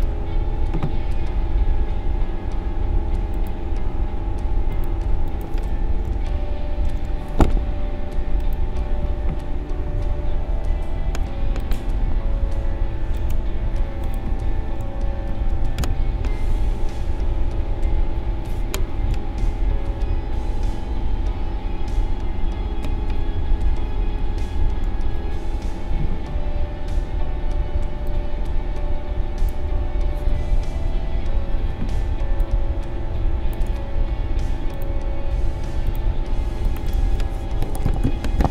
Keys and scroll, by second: 15.2 ctrl+v, 19.1 shift+Down, 22.0 shift+Down, 23.1 shift+Up, 24.2 shift+Up, 24.8 shift+Down, 37.7-38.5 typing.